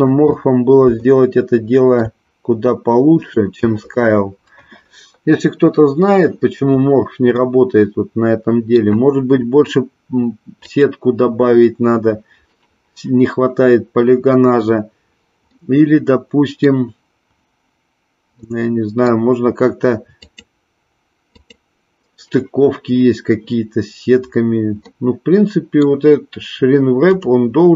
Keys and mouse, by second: 1.1-2.0 shift+middle drag, 7.4-8.8 middle drag, 10.5 click, 15.5-16.8 middle drag, 18.5-19.3 middle drag, 20.3 click, 21.2 click, 24.9-25.9 middle drag, 27.1 click.